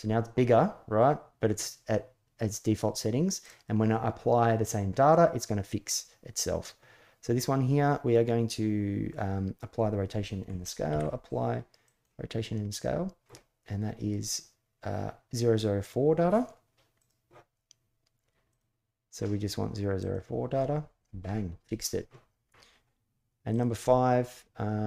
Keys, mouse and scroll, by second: 10.6 ctrl+a, 16.8 click.